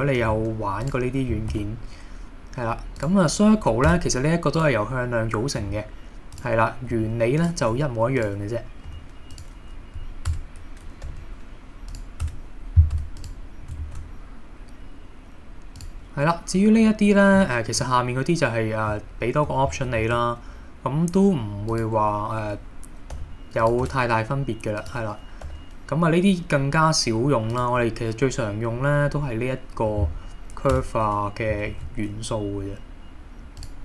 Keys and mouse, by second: 0.2 g, 0.8 click, 1.5 shift+a, 3.9 Tab, 5.7 g, 6.3 click, 6.9 r, 7.4 click, 7.7 g, 8.2 click, 8.9 r, 9.3 click, 10.3 Tab, 11.1 g, 11.9 click, 12.2 Tab, 12.9 Tab, 13.2 click, 13.9 shift+a, 20.0 shift+a, 23.1 g, 23.6 click, 23.9 Tab, 25.5 g, 27.5 click, 30.7 Tab, 31.7 shift+a.